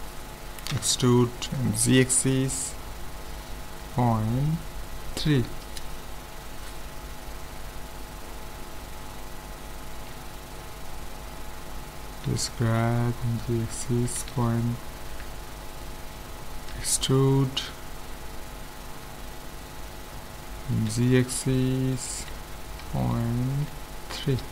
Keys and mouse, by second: 0.7 e, 7.8-10.0 middle drag, 10.0 ctrl+z, 10.7-13.2 middle drag, 12.3 g, 16.8 e.